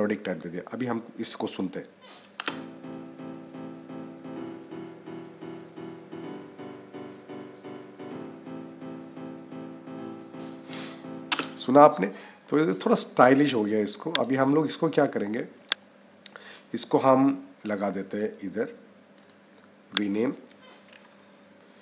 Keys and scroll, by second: 2.2 -, 11.1 space, 21.7 p.